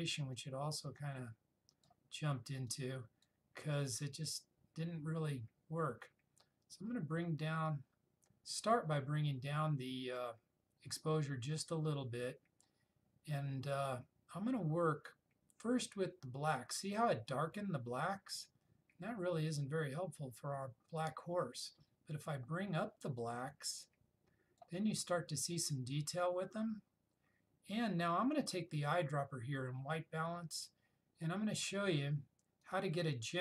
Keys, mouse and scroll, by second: 6.8-9.0 drag, 18.6-24.8 drag, 32.8 click.